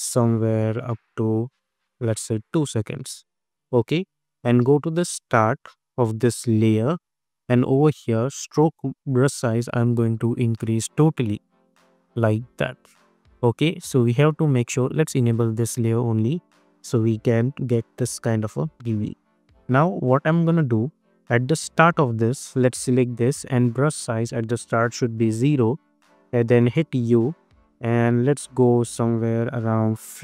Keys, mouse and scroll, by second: 12.7 space, 14.4 click, 15.4 space, 18.4 space, 21.0-22.6 drag, 25.2 Return, 26.7 u, 27.3 scroll down 2, 28.9-30.2 drag.